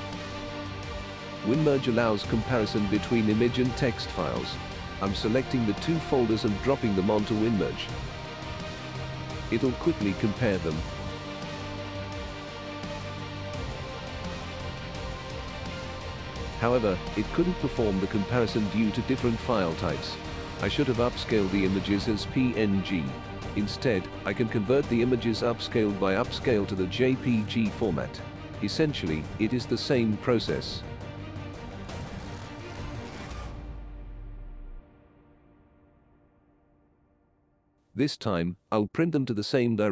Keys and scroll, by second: 28.3 Return.